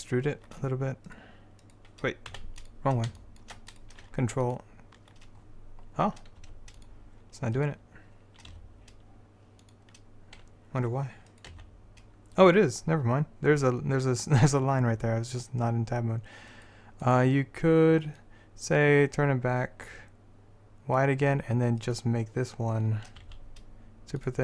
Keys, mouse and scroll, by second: 0.0 click, 2.4 x, 3.4 click, 3.8 click, 4.6 middle click, 6.5 x, 8.6 e, 11.6 z, 18.3-21.9 drag, 23.3 s.